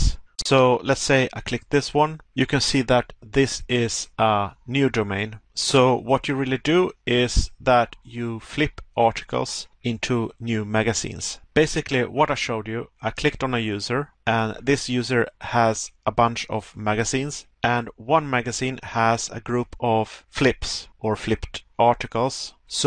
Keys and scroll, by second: 0.2 Pause, 11.5 Pause, 14.2 Pause, 17.4 Pause, 19.8 Pause, 21.2 Pause, 22.7 Pause.